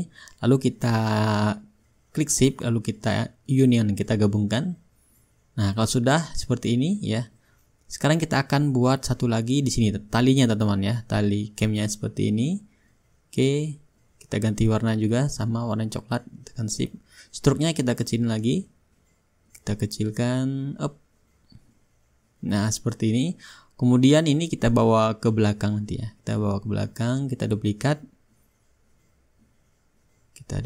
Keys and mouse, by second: 1.2-2.0 middle drag, 2.0-3.1 shift+drag, 3.4-4.5 drag, 5.4-6.5 drag, 6.8-8.1 drag, 8.9-9.9 drag, 11.4-12.6 drag, 13.1-14.3 drag, 14.3 Return, 15.7-17.5 drag, 18.6-24.4 drag, 24.4-25.1 middle drag, 25.1-27.8 drag, 27.8-30.0 shift+middle drag.